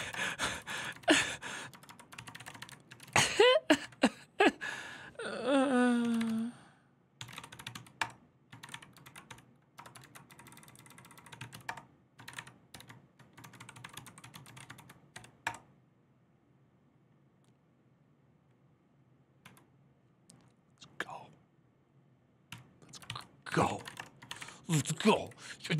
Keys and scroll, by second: 0.0-3.6 typing, 5.5-15.4 typing, 10.4 Left, 12.0 Return, 12.1 Up, 22.6-24.8 typing, 24.8 Left, 25.0 Left, 25.4 ctrl+w, 25.6 ctrl+w.